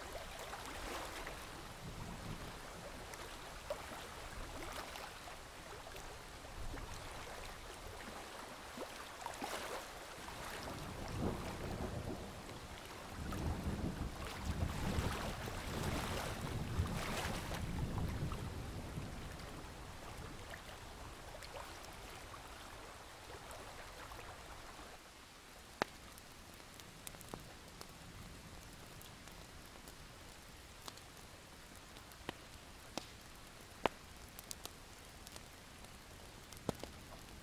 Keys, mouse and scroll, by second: 0.3 alt+scroll up 1, 0.7 click, 1.2 alt+scroll down 1, 1.4 scroll up 1, 1.7-3.2 alt+scroll down 2, 3.2-3.8 scroll up 1, 3.9-4.4 alt+scroll up 1, 4.4 click, 6.8-7.3 alt+scroll up 1, 7.3-8.5 drag, 9.7 alt+scroll down 1, 10.0-10.4 alt+scroll up 1, 10.4-13.0 drag, 13.4-14.1 alt+scroll up 1, 14.1-16.0 drag, 16.7-17.4 alt+scroll down 2, 16.9 click, 17.4-18.3 alt+scroll up 2, 18.3-20.4 scroll down 1, 20.4 alt+scroll down 1, 20.8 alt+scroll up 1, 21.9-23.1 alt+scroll up 1, 23.1 click, 24.9 shift+click, 26.2 shift+click, 26.6 shift+click, 27.3 shift+click, 27.9 shift+click, 29.0-37.4 drag.